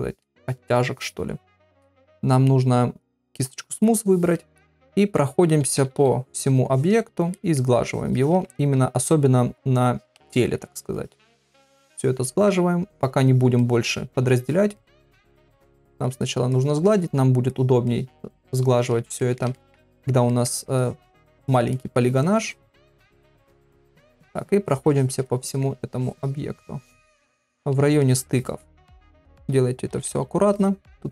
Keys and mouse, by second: 3.1 click, 4.3 middle click, 5.6 ], 5.8 ], 6.3 click, 6.7 click, 7.3 middle click, 7.9 click, 8.2 click, 8.5 ctrl+middle click, 9.9 click, 10.3 shift+middle click, 11.0 click, 11.3 click, 11.6 click, 11.9 click, 12.2 middle click, 12.9 click, 13.3 click, 13.6 middle click, 14.4 click, 14.7 middle click, 15.3 click, 15.6 click, 16.0 click, 16.5 click, 16.9 middle click, 17.5 click, 17.9 middle click, 18.5 click, 19.2 ctrl+middle click, 19.5 shift+middle click, 19.9 middle click, 20.3 ctrl+middle click, 20.8 click, 21.0 click, 21.4 click, 21.7 middle click, 22.4 click, 23.0 shift+middle click, 23.5 click, 23.8 click, 24.1 middle click, 24.6 click, 25.2 shift+middle click, 26.0 click, 26.5 click, 27.5 middle click, 28.0 shift+middle click, 28.6 shift+middle click, 29.1 ctrl+middle click, 29.9 [, 30.0 [, 30.5 click, 30.9 middle click.